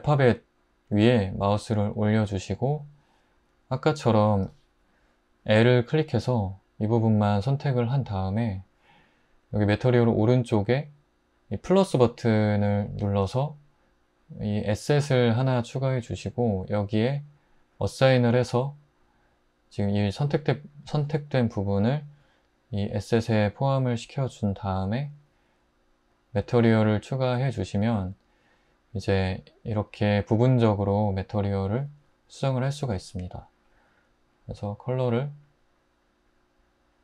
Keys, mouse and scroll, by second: 27.9 Tab.